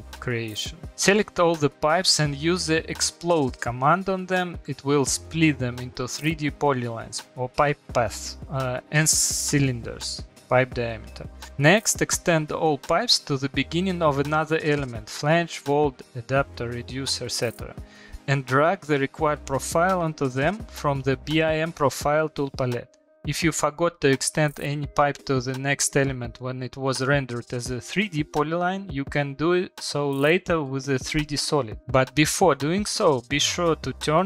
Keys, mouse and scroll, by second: 0.8 click, 0.8 middle click, 2.1 click, 2.8 click, 3.9-5.7 typing, 4.0 click, 6.4 Return, 8.3 click, 8.5 click, 9.4 click, 9.6 click, 9.8 click, 10.0 click, 10.5 click, 10.7 click, 10.9 click, 11.4 click, 17.5 click, 20.3 click, 23.4 Return, 25.9 middle click, 25.9 middle click, 25.9 middle click, 26.5 middle click, 26.5 middle click, 30.3 shift+middle click, 31.6 middle click, 31.7 middle click, 31.7 middle click, 31.8 click, 31.8 middle click, 32.3 click, 33.9 click.